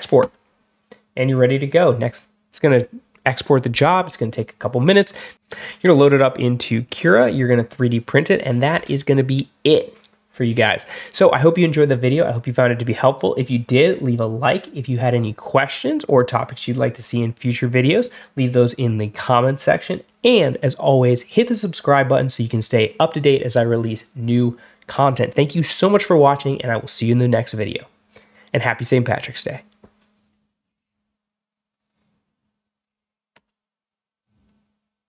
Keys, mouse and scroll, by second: 0.1 click, 33.2 click.